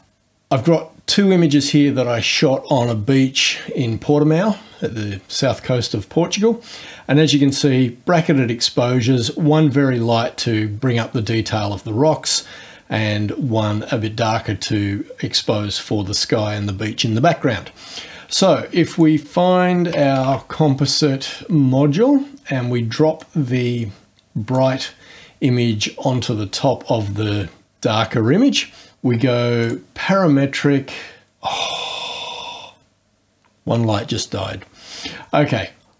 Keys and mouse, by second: 7.4 click, 12.3 click, 18.9 click, 19.7-20.7 typing, 23.2-24.8 drag, 29.6 click.